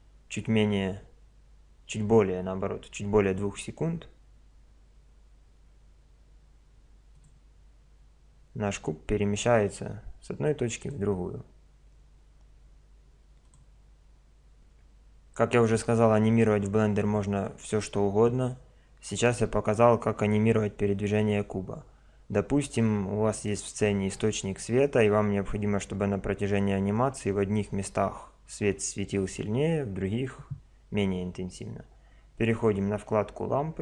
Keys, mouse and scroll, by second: 7.1-8.9 drag, 10.8-12.5 drag, 13.4 click, 23.3 right click, 25.1 drag, 32.4 click.